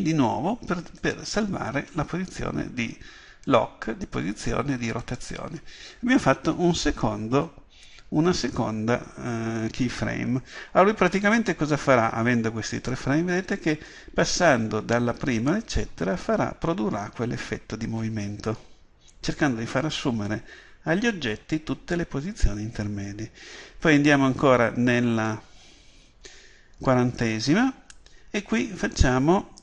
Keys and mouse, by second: 12.9-15.7 drag.